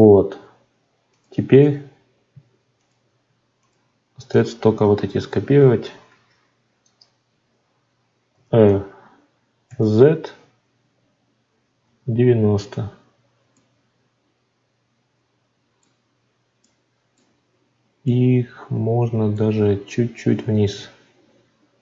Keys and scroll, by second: 6.0 shift+d.